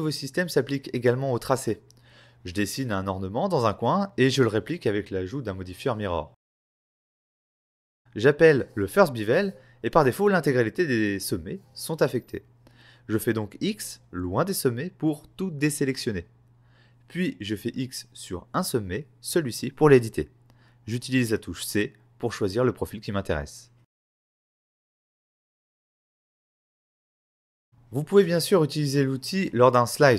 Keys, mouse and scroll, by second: 0.5 s, 1.0 right click, 1.4 middle click, 2.4 click, 2.9 click, 3.3 click, 5.1 click, 5.6 double click, 6.0 click, 6.1 click, 6.1 scroll up 2, 6.2 middle click, 6.4 click, 7.1 shift+click, 7.3 middle click, 7.4 click, 14.1 x, 15.4 x, 19.9 click, 20.5-20.9 scroll down 2, 21.2 middle click, 22.0 click, 23.9 x, 24.3 z, 24.7 click, 24.9 right click, 25.1 shift+middle click, 25.5 scroll down 1, 25.6 middle click, 26.9-27.3 scroll up 1, 27.8 f.